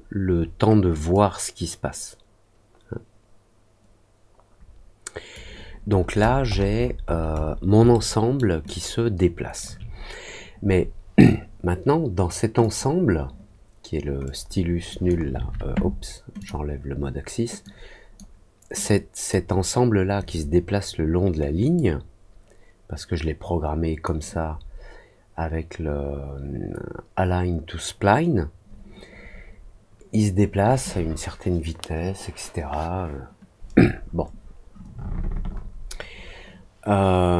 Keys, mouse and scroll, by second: 1.1-5.3 drag, 5.9-7.5 scroll down 6, 7.9 alt+middle click, 8.6 alt+click, 12.5 click, 14.2 click, 16.3 click, 17.6 click, 18.7 click, 21.7-24.0 drag.